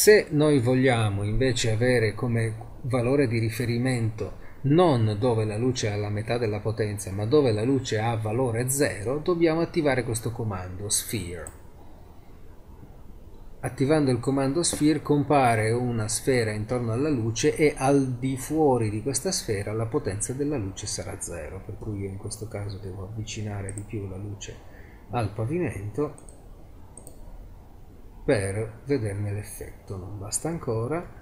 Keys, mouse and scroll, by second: 11.2 click, 11.8-12.9 drag, 13.1-15.0 middle drag, 14.2 z, 21.8 g, 24.3 z, 29.6 z, 30.6 g.